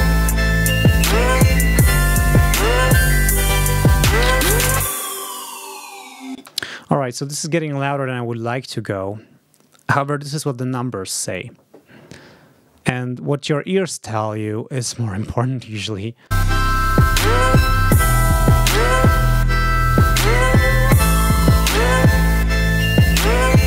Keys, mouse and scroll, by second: 6.2 space, 15.5 click, 15.9 ctrl+scroll up 2, 16.2 ctrl+space.